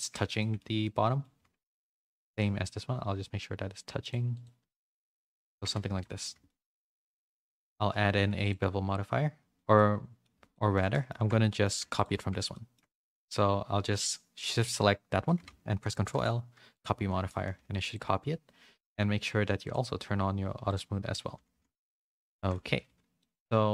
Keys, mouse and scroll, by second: 0.4 shift+middle click, 1.7 2, 1.8 click, 2.0 middle click, 2.3 g, 4.3 click, 4.5 g, 5.5 Tab, 5.7 a, 5.9 a, 5.9 middle click, 6.4 shift+middle click, 6.6 middle click, 7.1 shift+middle click, 8.4-9.5 drag, 9.7 middle click, 10.5 shift+middle click, 10.9 middle click, 11.4 shift+middle click, 12.5 shift+middle click, 12.9-15.4 middle drag, 15.9 ctrl+l, 17.2 shift+middle click, 17.5 a, 17.7 a, 17.8 click, 20.6 click, 21.5 a, 21.7 middle click, 22.3 shift+middle click, 22.8 a, 23.1 middle click.